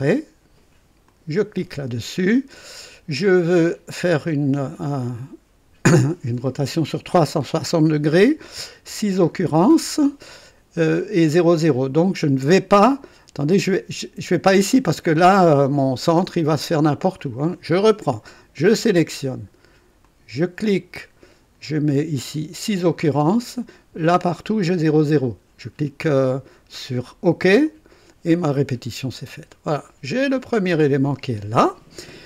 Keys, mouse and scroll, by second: 1.0 click, 3.6 click, 8.8 KP_6, 17.1 click, 18.6 click, 20.0 click, 22.2 scroll up 1, 27.6 click, 28.7 scroll down 1, 29.1 right click.